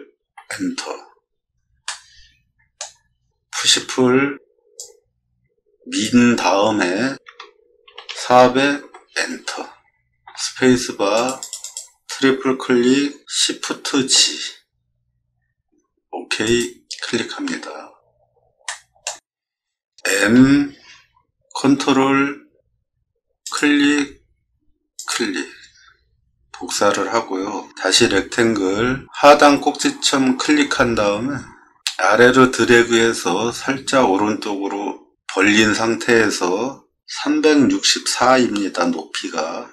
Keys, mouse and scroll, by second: 0.2 Return, 1.8 middle click, 4.7-6.0 drag, 7.2 4, 7.8 0, 8.8 Return, 10.3 space, 11.1 click, 11.4 click, 11.6 click, 13.9 shift+g, 16.4 click, 18.6 middle click, 19.4 scroll up 4, 19.5 middle click, 20.3 m, 23.4 click, 24.9 click, 28.3 r, 29.8 click.